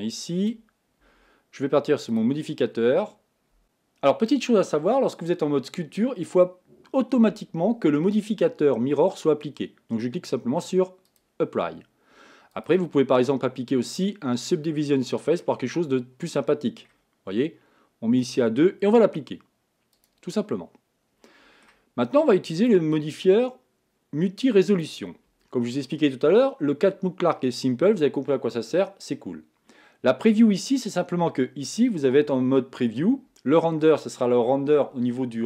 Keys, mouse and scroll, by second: 0.0-3.6 drag, 3.6-11.1 middle drag, 11.1-15.4 drag, 15.4-18.3 middle drag, 18.3-21.2 drag, 21.2-24.8 middle drag, 24.8-31.4 drag, 31.4-35.4 middle drag.